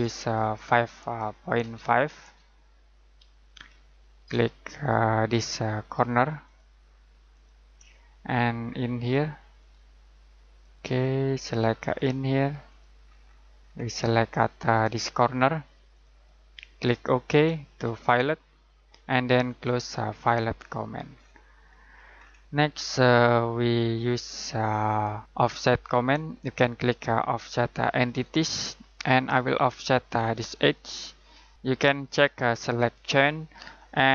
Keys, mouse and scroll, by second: 0.2 click, 1.6 typing, 2.8-3.5 typing, 6.4 click, 8.2-9.5 scroll down 1, 9.5 click, 13.2-14.8 scroll up 1, 14.8 click, 21.1-21.5 scroll down 1, 21.5-21.9 scroll up 1, 21.9 scroll down 1, 22.1-24.4 scroll up 1, 24.4-25.2 scroll down 1, 28.0 click, 30.5 click, 33.0 click.